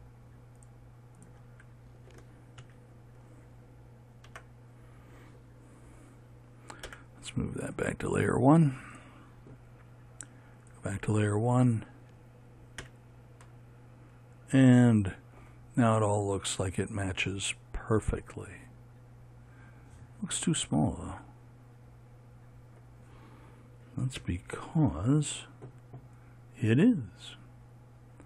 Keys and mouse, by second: 2.1 f, 3.2 a, 4.9 Tab, 7.4 m, 13.4 a, 24.8 KP_7.